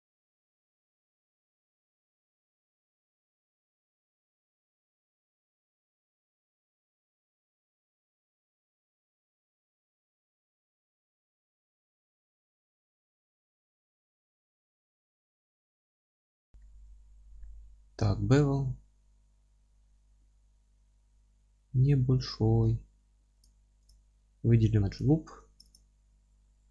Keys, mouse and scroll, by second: 0.5 click, 3.1 click, 3.6-3.9 scroll up 2, 3.9 scroll down 2, 4.1 middle click, 4.6-7.1 drag, 7.0 scroll down 1, 7.1-7.6 alt+middle drag, 7.7-8.1 scroll down 2, 7.8-12.8 alt+middle drag, 8.4 alt+z, 9.0 scroll down 1, 9.3 scroll up 1, 10.5 scroll up 1, 12.8 click, 12.9 Tab, 13.1-16.2 middle drag, 13.5 ctrl+r, 16.2 click, 16.3 scroll down 1, 16.6-23.4 middle drag, 17.0-17.4 scroll up 1, 17.6-18.0 scroll up 1, 18.1 ctrl+b, 23.4 click, 24.7 3, 25.0 click, 25.7 click, 26.1 scroll down 1, 26.5-26.7 middle drag.